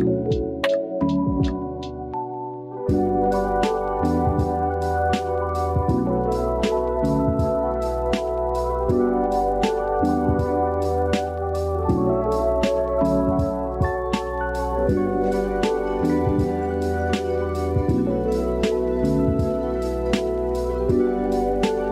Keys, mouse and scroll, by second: 1.1-1.5 middle drag, 1.8 middle drag, 2.4-3.3 drag, 3.3 KP_3, 4.2 shift+middle drag, 4.6 click, 4.8 Tab, 5.6 click, 7.7 g, 8.2 z, 11.7 click, 12.1 click, 12.5 click, 14.1 click, 14.6 click, 15.0-16.5 middle drag, 16.7 Tab, 16.8 click, 17.1 middle click, 17.8 click, 18.0 Tab, 19.2 KP_7.